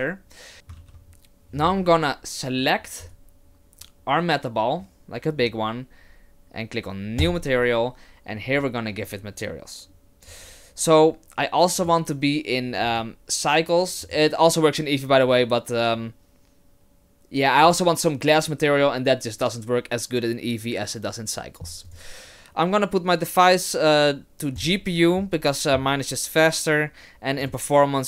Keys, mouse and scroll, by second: 0.5 click, 0.8 ctrl+z, 3.0 right click, 7.2 click, 11.8 click, 12.9 click, 21.9 click, 27.4 click.